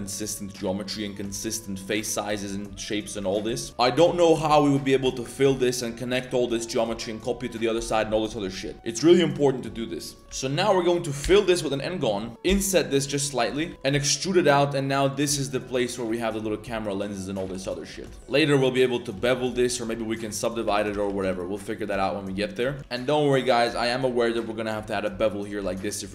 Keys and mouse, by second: 0.7 shift+middle drag, 1.3 shift+middle click, 2.0 shift+middle drag, 2.6 shift+middle drag, 3.2 shift+middle click, 3.6-5.7 typing, 5.0 alt+click, 6.5 shift+click, 8.7 z, 9.4 click, 10.1 click, 10.2-11.2 typing, 12.4 i, 13.7 z, 13.7 click, 13.7 z, 13.9 e, 16.0 click, 18.2 Tab, 18.2 ctrl+b, 18.2 2, 19.5 Tab, 19.6 click, 20.0 click, 20.6 Tab, 20.9 ctrl+z, 21.2 ctrl+z, 21.6 drag, 21.9 Tab, 22.0 click, 22.3 Tab, 22.6 2, 22.8 ctrl+b, 25.6 Tab, 25.7 middle drag.